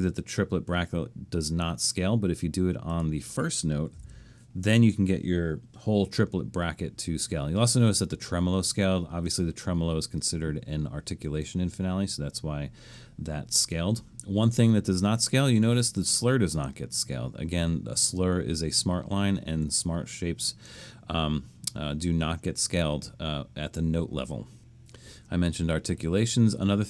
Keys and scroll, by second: 3.7-4.5 typing.